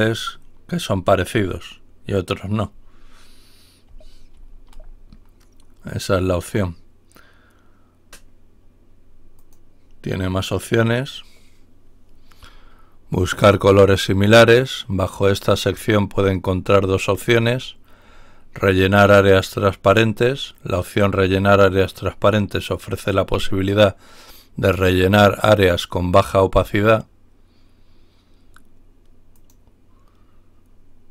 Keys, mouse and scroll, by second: 4.4 ctrl+y, 9.4 click, 12.4-13.0 scroll down 2, 17.3-18.0 scroll down 2, 18.0 scroll down 1, 29.3 click.